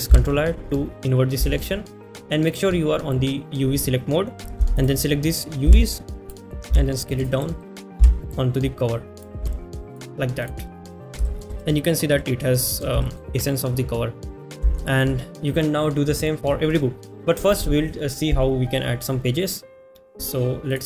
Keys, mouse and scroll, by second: 1.5 ctrl+shift+i, 7.1 g, 8.0 s, 8.7-20.8 middle drag.